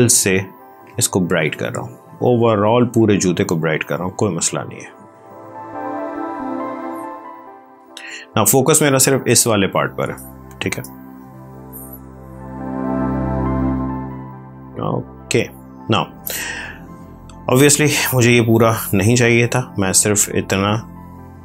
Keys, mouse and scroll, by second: 3.7 click, 10.0 space, 11.8 click, 15.3 click, 20.3 click.